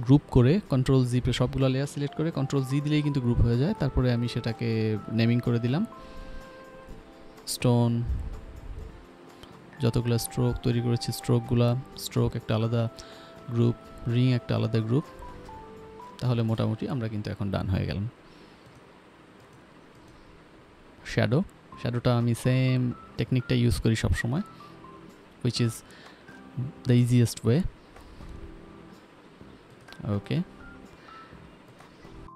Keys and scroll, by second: 0.0-0.9 typing, 6.6 ctrl+g, 8.2-10.3 typing, 10.3 Return, 11.1 ctrl+s, 13.3 ctrl+g, 14.1-15.7 typing, 21.1-21.9 typing, 27.1 ctrl+z, 30.9 Return, 31.0 ctrl+alt+d, 31.5-32.3 typing.